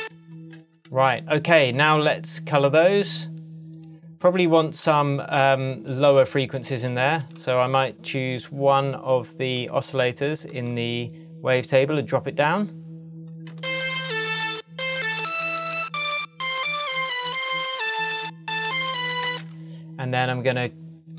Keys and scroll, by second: 0.0-0.3 typing, 13.5 space, 19.2 space.